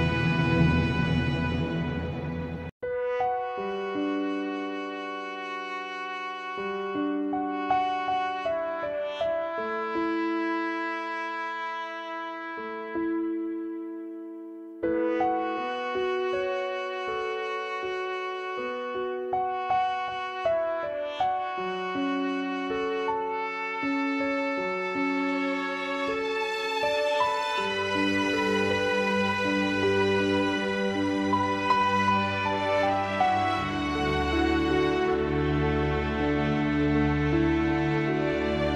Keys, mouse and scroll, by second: 1.4 click, 3.3 shift+click, 3.8 g, 4.8 click, 4.9 g, 5.8 click, 8.0-9.3 drag, 10.5 shift+click, 11.4-13.2 right drag, 13.2 g, 13.7 click, 13.7 g, 14.6-16.4 right drag, 16.4 1, 17.8 shift+click, 18.8 click, 19.2 g, 20.6 shift+click, 22.0 click, 22.7 e, 23.8 s, 24.9-25.5 typing, 26.7 click, 28.6 click, 29.2 g, 30.2 click, 30.5 g, 31.4 3, 32.0 shift+click, 33.2 click, 34.0 e, 35.7 g, 36.1 s, 36.7 g, 37.7 r.